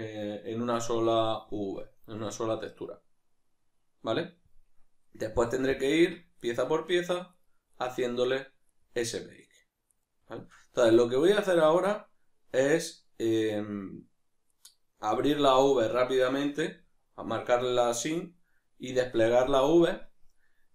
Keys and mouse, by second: 6.4 right click, 6.9 right click, 7.3 right drag, 7.7 right click, 9.3 right click, 10.4-14.5 shift+middle drag, 14.5 right click.